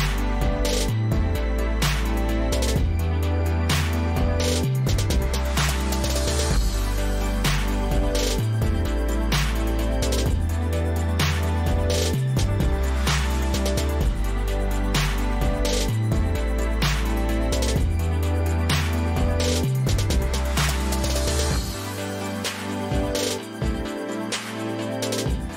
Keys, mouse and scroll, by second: 12.7 click, 14.1 click, 16.5 click, 17.1 click, 17.3 click, 18.2 ctrl+a.